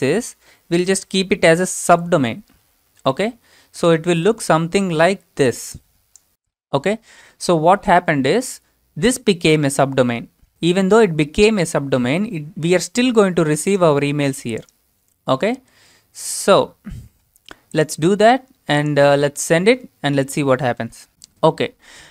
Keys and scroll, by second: 1.9 ., 3.9 alt+Tab, 5.9-6.3 typing, 8.0 typing, 15.8 alt+Tab.